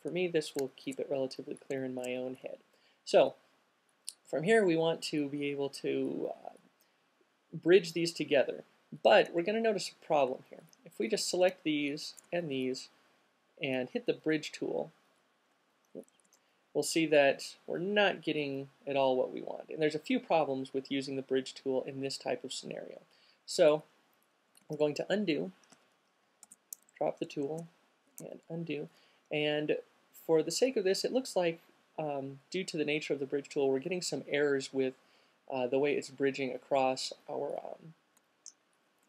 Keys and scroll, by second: 16.4 alt+super+z, 24.8 super+z, 25.9 super+q, 26.5 alt+super+z.